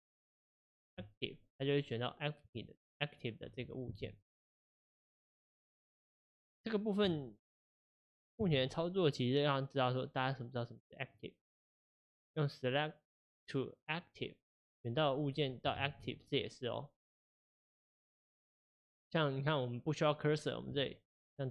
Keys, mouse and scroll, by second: 2.7 shift+click, 4.1 shift+s, 7.2-8.6 shift+middle drag, 8.6 shift+s, 15.7 ctrl+z, 17.2 click, 17.8 click, 20.9 shift+click.